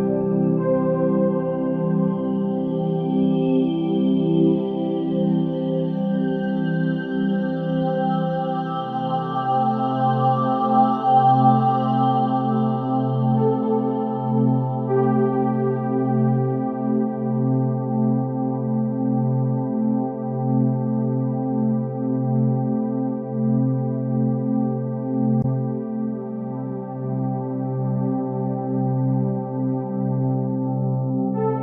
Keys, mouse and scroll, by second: 1.8-4.8 drag, 4.8 KP_0, 6.0 click, 8.1 r, 12.6 r, 16.6 s, 18.4 g, 24.0 click, 25.3-26.8 scroll down 2, 26.8 shift+a, 31.0 click.